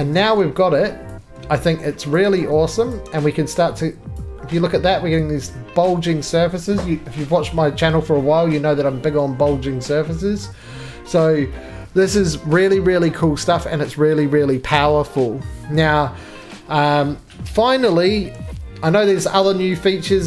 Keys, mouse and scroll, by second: 0.0 shift+click, 1.0 click, 1.6 2, 2.2 click, 2.4 right click, 2.9 click, 4.1 click.